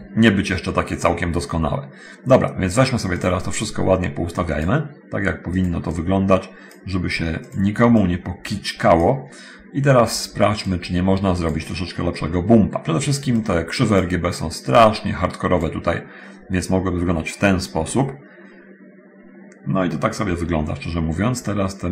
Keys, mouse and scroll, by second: 0.0-1.8 drag, 2.4-3.1 drag, 3.4 click, 3.9 click, 5.4 click, 6.1-6.8 drag, 7.7 click, 8.2 click, 9.9-10.6 drag, 10.9 click, 13.6 click, 14.9-16.0 drag.